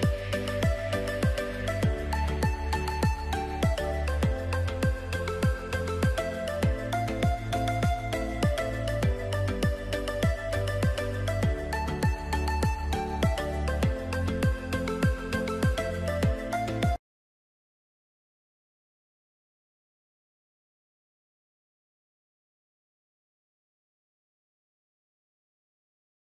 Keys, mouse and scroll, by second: 4.2 click, 7.4 click, 11.4 click.